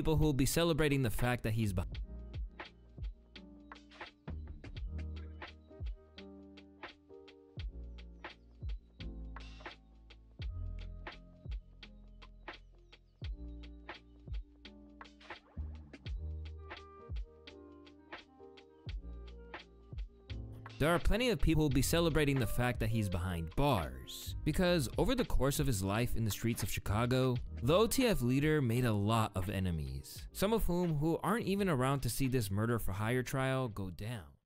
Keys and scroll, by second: 2.8 ctrl+space, 3.0-3.9 typing, 5.8 typing, 14.6-15.4 typing, 19.7 typing, 19.8 Return.